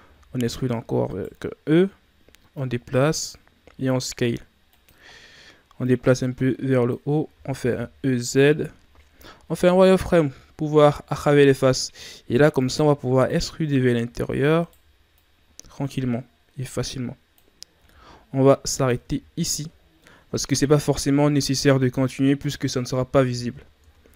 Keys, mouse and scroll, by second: 0.1 e, 2.5-3.5 drag, 3.5 s, 5.1-5.8 scroll down 1, 5.8-7.3 drag, 7.3 e, 10.1-10.5 shift+scroll up 2, 10.5 z, 10.8-11.2 scroll up 2, 11.7-12.5 ctrl+scroll down 2, 12.5-14.1 drag, 14.1 e, 15.1-17.7 drag, 17.7 s, 19.3-20.0 scroll down 4, 20.0 middle click, 21.0-21.9 scroll up 3, 23.8 Tab.